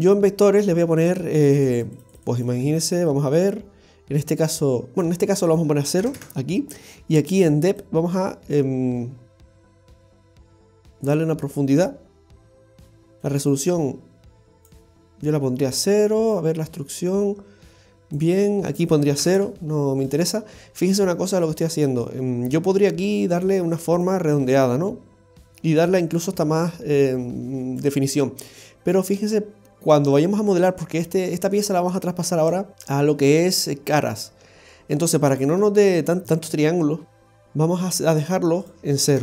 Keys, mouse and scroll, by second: 1.1 click, 1.4 click, 1.6 click, 1.8-2.2 click, 2.0 click, 2.1 click, 7.8 click, 13.2 click, 18.7 click, 20.5-21.0 scroll up 3, 21.0 middle click, 23.0 click, 26.2 click, 28.4 click, 36.2 middle click, 36.2 scroll down 3, 37.4-37.8 scroll up 1, 38.6 click.